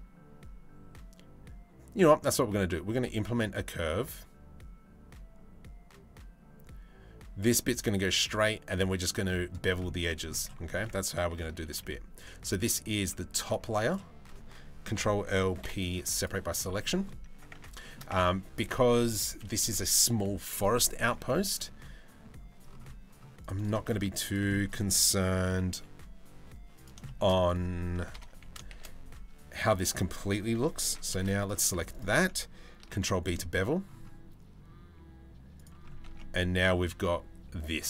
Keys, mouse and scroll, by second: 9.6 middle click, 10.1 Tab, 10.3 Tab, 11.2 ctrl+r, 14.5 ctrl+l, 15.2 p, 16.4 middle click, 17.1 Tab, 17.4 shift+middle drag, 17.7 Tab, 20.6 ctrl+r, 23.4 shift+middle click, 24.1 middle click, 24.9 g, 26.6 shift+middle click, 27.7 ctrl+l, 28.0 s, 31.0 alt+click, 32.4 ctrl+b, 35.6 Tab, 35.8-36.4 middle drag.